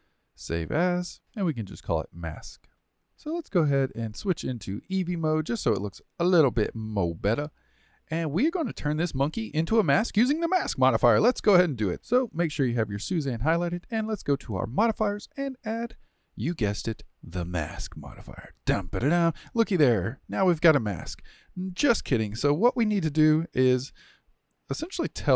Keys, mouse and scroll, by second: 3.1 click, 4.8 click, 5.5-11.9 middle drag, 13.9 click.